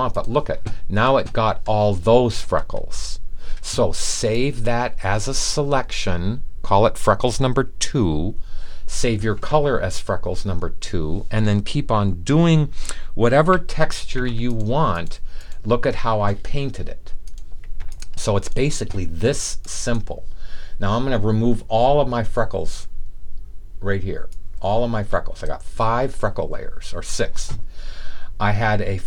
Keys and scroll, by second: 13.5 super+d, 16.2 super+d.